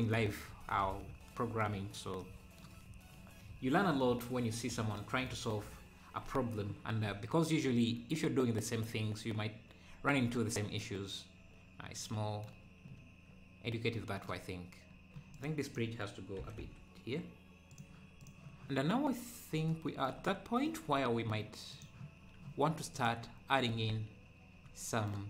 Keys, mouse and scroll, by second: 4.1-4.5 scroll up 3, 10.4 scroll down 2, 14.7 scroll down 1, 15.4-16.4 drag, 16.4 g, 18.2 click, 18.9 scroll down 2, 20.3 middle click, 20.9-21.7 scroll up 1, 21.7-23.7 drag, 23.7 ctrl+s.